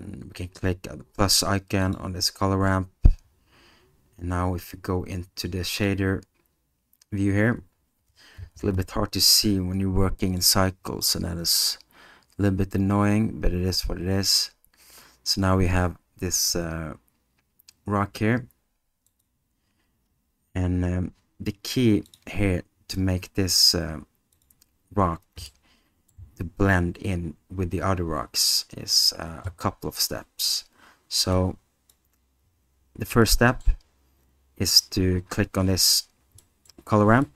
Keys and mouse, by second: 1.8 click, 5.8 click, 10.5 alt+click, 19.1 click, 25.5-26.1 middle drag, 31.3 click, 33.4 middle click, 36.6 middle click, 37.2 middle click.